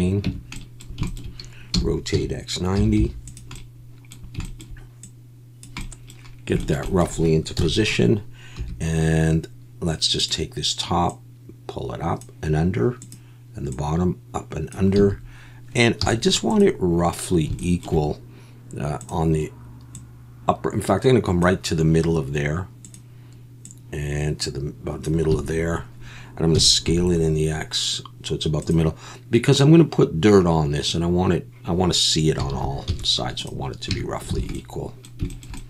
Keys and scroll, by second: 0.2 Tab, 1.7 r, 2.1 x, 2.7 9, 3.0 0, 7.6 KP_1, 8.6 2, 15.0 a, 16.0 z, 25.3 a, 26.5 s, 26.9 x, 32.5 alt+a, 32.9 z, 33.9 Tab, 34.4 alt+a.